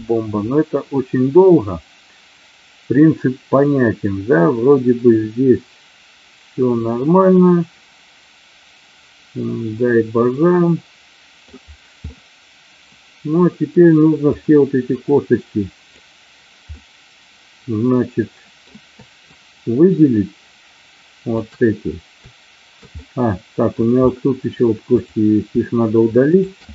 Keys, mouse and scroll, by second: 0.0-11.6 middle drag, 12.1-13.7 middle drag, 14.2-16.0 drag, 16.7-18.5 middle drag, 19.2-21.5 shift+drag, 22.9 middle click, 25.0 click, 26.2 shift+click.